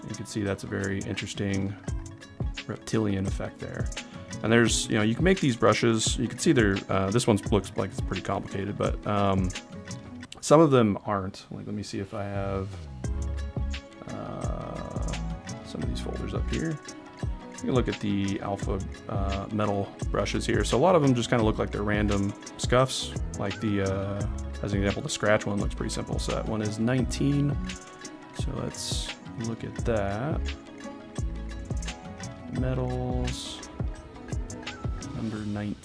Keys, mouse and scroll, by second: 28.6 drag.